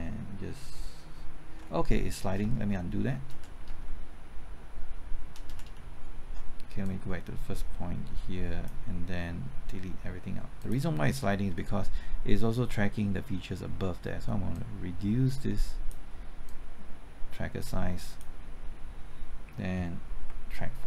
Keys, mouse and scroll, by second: 0.5 alt+Right, 1.7 typing, 3.3-4.3 typing, 3.8 ctrl+z, 4.3 ctrl+z, 4.4 ctrl+z, 4.5 ctrl+z, 4.5 ctrl+z, 6.8 ctrl+z, 6.8-9.4 drag, 11.0-12.0 scroll up 1, 14.5-18.4 drag, 20.2 typing.